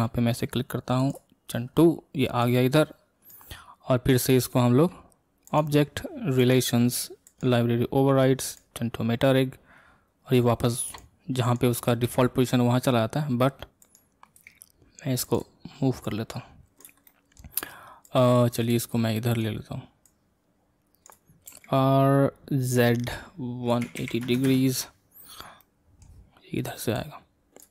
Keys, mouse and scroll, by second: 2.5 click, 11.0 click, 11.6 click, 12.0 x, 14.0 click, 14.4 x, 15.4 click, 16.1 click, 17.0-18.1 middle drag, 18.1 click, 18.8 scroll down 1, 19.1-20.2 middle drag, 20.2 click, 21.6 r, 25.6-27.0 middle drag, 27.0 click.